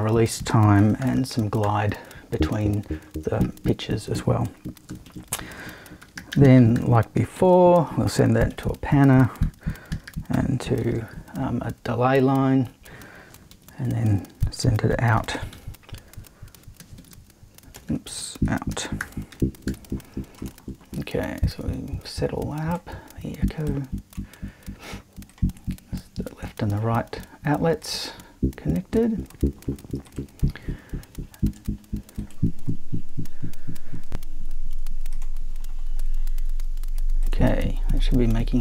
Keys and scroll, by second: 0.5-1.5 typing, 5.0 super+i, 6.0 super+p, 6.1-7.3 typing, 8.3 shift+super+`, 9.4 super+e, 9.8-11.3 typing, 13.5 super+i, 14.7-20.2 typing.